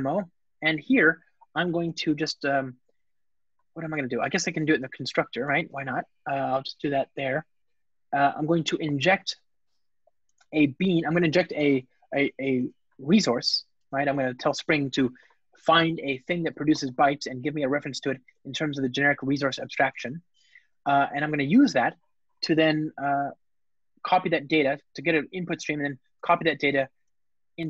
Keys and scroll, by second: 2.0 Return, 10.1 Return, 19.3 Return, 21.1 alt+super+l.